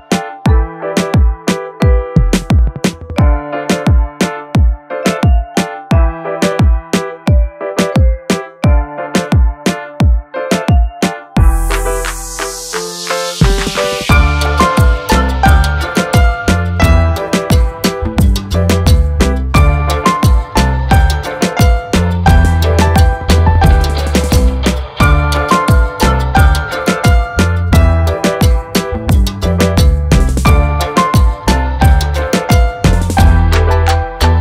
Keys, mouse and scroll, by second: 1.6 click, 2.0-2.7 scroll down 1, 2.7-3.5 scroll up 1, 3.6 scroll down 1, 4.5-5.2 scroll up 1, 7.5 click, 10.4 click, 10.9-11.3 scroll down 1, 11.3 click, 12.4-12.8 scroll up 1, 12.8-13.2 scroll down 1, 13.2-13.9 scroll up 1, 14.3-14.6 scroll up 1, 15.0 ctrl+click, 16.6 click, 17.0-17.9 scroll down 1, 17.9-18.3 scroll up 1, 18.3 click, 19.4 F4, 22.0 F9, 25.0 F9, 25.6 ctrl+o, 26.7-27.0 scroll down 1, 27.9 click, 29.7 click, 30.7 click, 32.5 click, 33.8 F4.